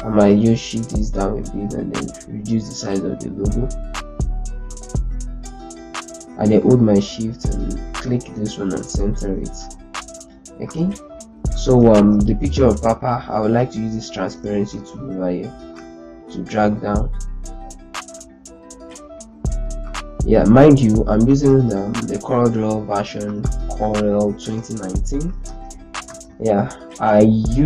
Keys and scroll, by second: 0.3 shift+Down, 0.5 shift+Down, 0.7 shift+Down, 6.7 shift+c, 9.3 z, 11.5 ctrl+space, 21.6 ctrl+z, 25.2 ctrl+space.